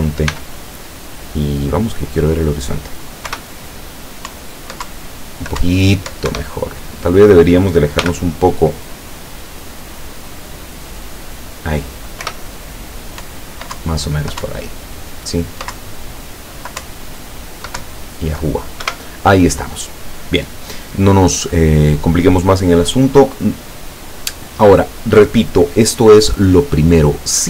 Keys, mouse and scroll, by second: 0.3 g, 2.4 click, 3.4 p, 4.4 Up, 5.0 Down, 5.7 Up, 6.4 Escape, 8.0 g, 8.3 click, 11.3 click, 12.3 p, 13.3 Up, 13.8 Down, 14.6 Up, 15.8 Down, 16.8 Up, 17.9 Down, 18.9 Escape.